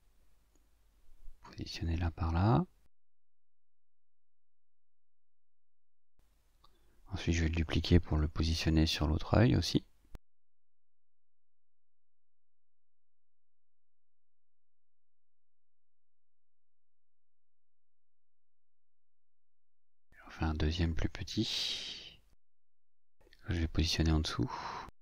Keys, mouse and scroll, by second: 1.3 click, 2.4-5.2 drag, 5.7-8.1 ctrl+shift+drag, 9.6 ctrl+d, 10.7-15.9 drag, 17.7 click, 21.3 click, 22.7-23.9 ctrl+shift+drag, 24.8 click.